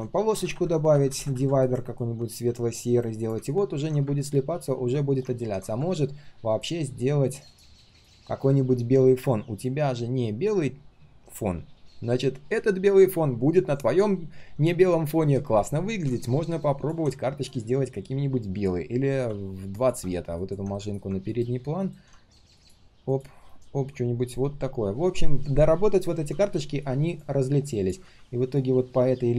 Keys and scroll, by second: 20.7 ctrl+shift+], 23.5 ctrl+shift+[, 23.6 ctrl+shift+[.